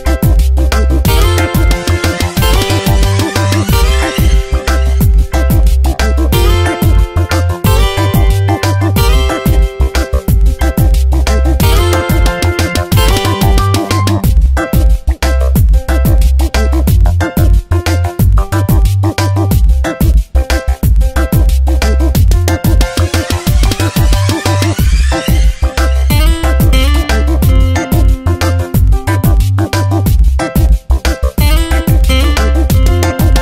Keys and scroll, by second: 0.3 e, 5.3 space, 6.8 space, 10.3 space, 11.9 space, 14.8 space, 16.9 space, 17.5 v, 23.1 ctrl+z, 24.4 space.